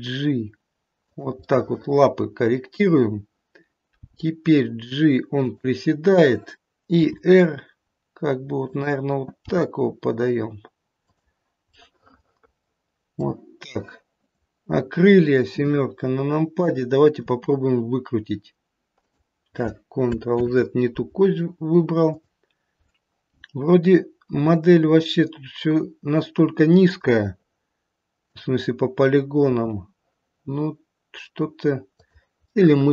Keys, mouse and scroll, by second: 1.4 middle click, 1.4 g, 2.7 middle click, 4.0 g, 7.0 r, 9.4 g, 11.6 middle click, 14.2 middle click, 14.2 click, 15.5 KP_7, 17.2 r, 20.4 ctrl+z, 22.0 click, 24.3 r, 28.2 click, 29.4 r, 32.5 middle click.